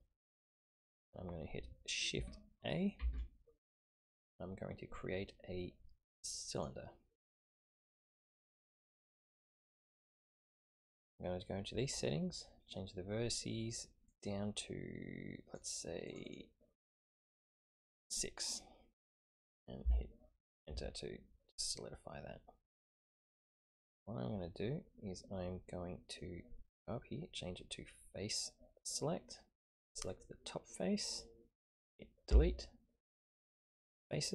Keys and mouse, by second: 3.0 shift+a, 10.8 click, 14.1-15.6 drag, 16.1 click, 16.2 click, 16.8 click, 19.8 Return, 23.4-26.3 middle drag, 28.8 click, 30.0 click, 32.3 Delete.